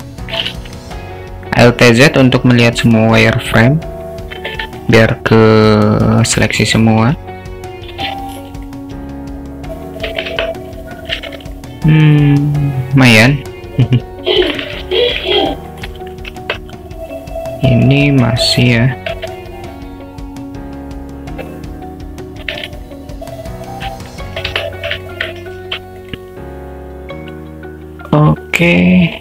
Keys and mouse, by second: 0.5 alt+z, 0.7-3.0 drag, 3.4 s, 6.5 a, 8.0 click, 8.9 s, 11.0 Tab, 11.2 alt+z, 11.6-14.5 alt+middle drag, 16.8 Tab, 18.2 click, 19.4-22.5 alt+middle drag, 22.7 s, 24.5 Tab, 25.1 alt+middle click, 28.6 s.